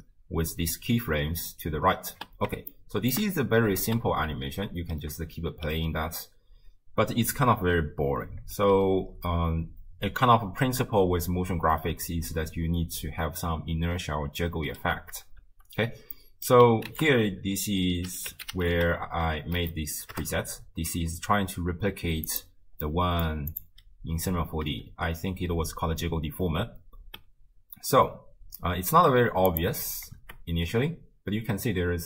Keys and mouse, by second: 1.0 space, 2.5 shift+space, 2.9 shift+click, 3.8 shift+space, 5.5 shift+space, 6.6 space, 8.7 space, 11.4 space, 12.7 space, 15.4 shift+space, 16.2 click, 16.9 ctrl+a, 22.9 middle click, 23.5 click, 24.8 shift+space, 27.0 space, 28.9 space, 30.2 shift+space.